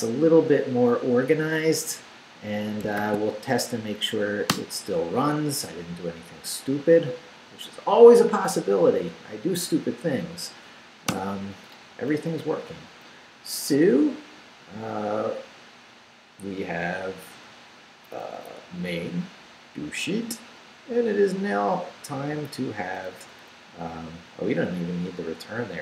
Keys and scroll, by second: 3.0 shift+;, 3.4 shift+Up, 4.5 Return, 11.1 Return, 12.2 Up, 17.7 Up, 18.5 Down, 22.3 Down, 22.9 Up.